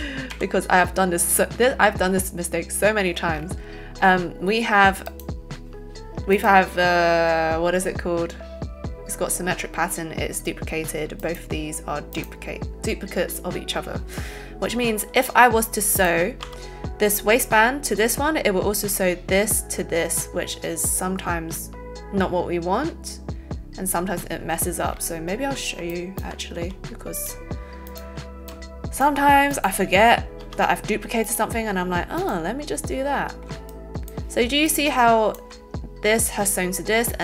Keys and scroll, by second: 16.4 n, 26.5 alt+a, 27.2 alt+shift+a, 28.5 alt+shift+a, 30.3 n.